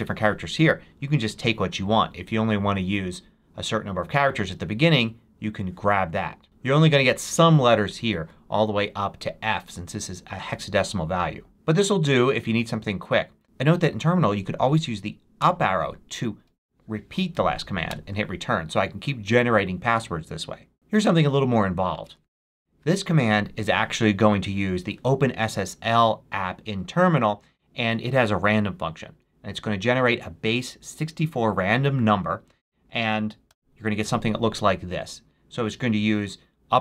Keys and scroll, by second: 15.3 Up, 17.8 Return, 22.0 super+v, 33.4 Return.